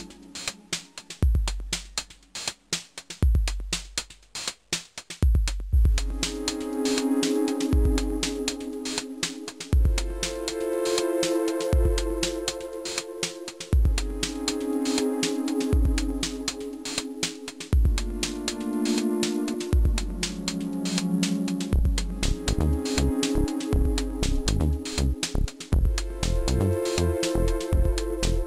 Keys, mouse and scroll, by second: 2.6 click, 4.7-5.7 scroll down 2, 5.7 click, 11.4 middle click, 11.7 scroll up 1, 12.1 shift+middle click, 12.5 scroll up 1, 13.7 Left, 14.0-14.9 Right, 14.9 scroll down 2, 15.1 Right, 15.3 Right, 15.5 Right, 15.7 Right, 15.8 Right, 16.2 Left, 16.5 Left, 16.7 Left, 16.9 Left, 17.3 middle click, 18.6 click, 20.6 middle click, 20.8 shift+r, 21.0 space, 21.4 middle click, 22.9 click, 23.9 shift+r, 24.2 middle click, 24.5 scroll up 1, 24.7 space, 25.4 click.